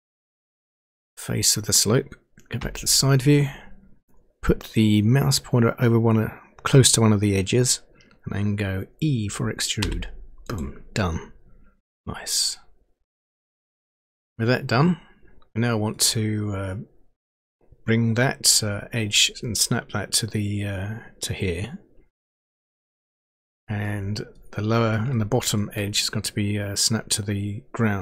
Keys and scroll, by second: 2.6 Page_Down, 9.9 e.